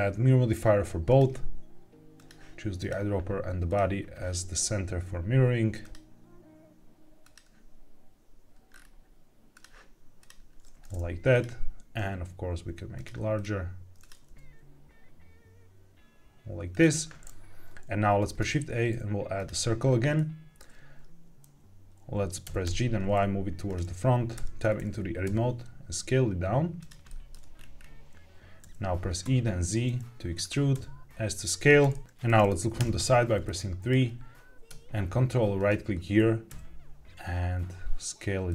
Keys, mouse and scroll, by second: 2.1 click, 3.6 click, 5.7-7.3 drag, 8.6 scroll down 2, 9.4 click, 11.2 click, 11.9 s, 13.3 click, 13.9 click, 14.2 g, 16.6 click, 18.1 shift+a, 19.7-20.1 scroll down 2, 20.1-20.5 middle drag, 22.4 g, 22.6 y, 23.6 click, 24.3 Tab, 25.2 s, 26.7 click, 27.0 shift+middle click, 27.5-28.2 scroll up 3, 28.5 e, 29.2 z, 30.3 click, 30.6 s, 31.5 click, 32.0 shift+middle click, 32.0-32.5 scroll up 3, 32.7 KP_3, 33.4 shift+middle click, 35.5 ctrl+right click, 36.4 s, 38.4 click.